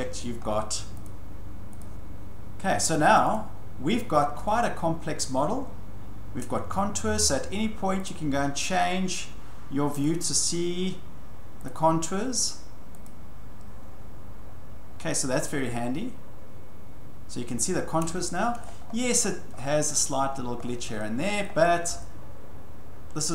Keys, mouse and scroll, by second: 0.2-1.7 shift+middle click, 0.4-1.0 scroll, 1.0 click, 1.8 click, 3.3 click, 5.1 scroll, 6.4-6.9 scroll, 8.1 click, 10.0 click, 11.1 scroll, 11.7 click, 13.1 click, 14.4-15.7 scroll, 18.0 scroll, 18.6-20.0 scroll, 20.3 scroll, 20.6 scroll down 11, 21.7-22.0 scroll up 2.